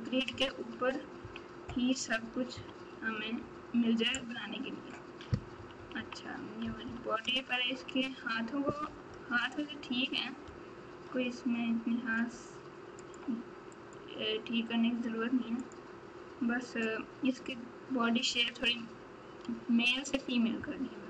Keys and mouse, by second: 0.2 KP_6, 2.5 KP_3, 5.5-6.8 typing, 7.2 KP_Add, 7.7 KP_Add, 8.8 KP_8, 9.0 KP_8, 9.2 KP_8, 12.9 click, 13.7-15.7 right drag, 18.3 KP_1.